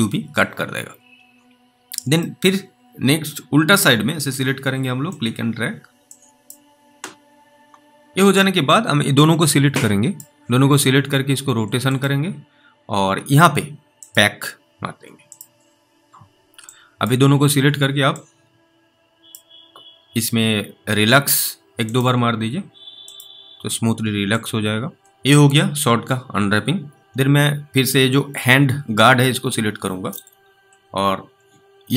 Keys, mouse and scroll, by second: 2.5 alt+middle click, 5.4 click, 5.9-6.3 scroll down 2, 6.3 click, 8.1 click, 9.5 click, 17.4 click, 18.4 click, 27.0-28.6 scroll up 3, 29.1 click.